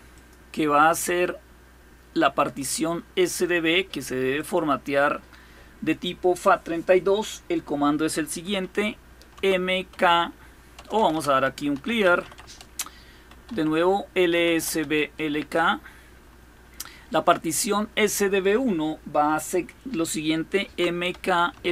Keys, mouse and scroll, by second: 0.7-2.4 drag, 4.1 click, 4.5 click, 9.1-14.9 typing, 15.1 Return, 20.4-21.7 typing.